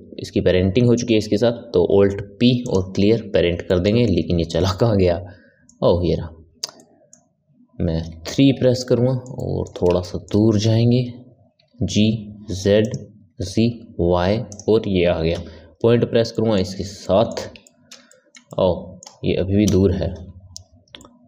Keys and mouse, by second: 1.7 alt+p, 3.6-8.0 ctrl+middle drag, 8.0 KP_3, 8.7-11.5 ctrl+middle drag, 11.5 g, 13.1 g, 15.3 KP_Decimal, 16.3-19.6 ctrl+middle drag, 19.6 KP_1, 20.9-21.2 ctrl+middle drag.